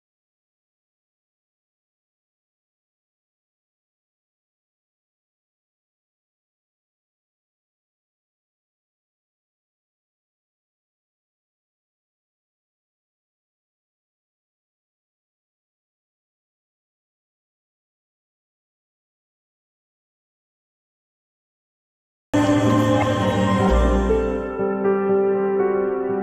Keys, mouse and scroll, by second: 0.4 middle click, 1.3 scroll up 2, 2.2 click, 8.7 click, 11.0-11.5 scroll up 1, 11.5-11.9 scroll down 1, 11.9-13.7 middle drag, 13.7 scroll up 1, 14.3-14.7 scroll down 1, 14.7-19.0 middle drag.